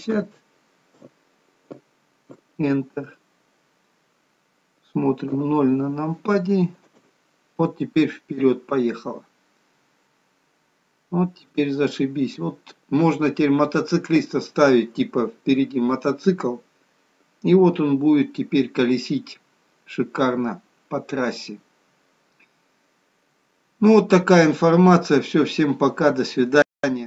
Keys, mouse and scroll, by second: 5.5 KP_0, 7.1 space.